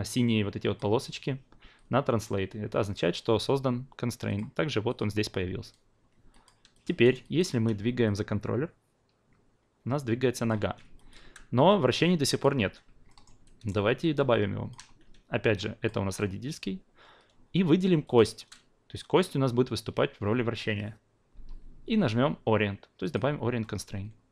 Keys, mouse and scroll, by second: 0.1 click, 2.2-4.4 drag, 4.9-6.3 drag, 6.3 alt+click, 6.7 click, 7.0 alt+right click, 7.2-10.5 alt+drag, 10.6 ctrl+z, 10.9 alt+click, 11.2 e, 11.7-12.4 drag, 12.5 ctrl+z, 13.1 alt+middle drag, 13.4 alt+right drag, 14.0-14.7 alt+drag, 15.0 q, 15.5 drag, 18.0 shift+click, 23.0-24.3 drag.